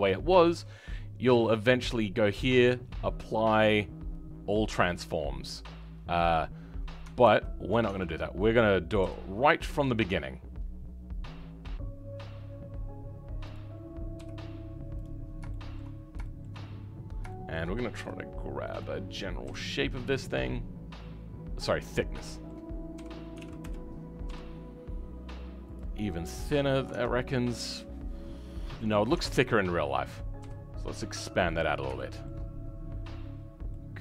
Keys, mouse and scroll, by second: 7.8 Tab, 15.2-15.5 scroll up 6, 15.5 shift+middle click, 15.9 scroll up 4, 16.2-17.9 shift+middle drag, 17.9 g, 19.4 s, 22.2 shift+middle click, 23.0 r, 31.9-33.3 shift+middle drag, 33.3-33.7 scroll down 5, 33.7-34.0 middle drag.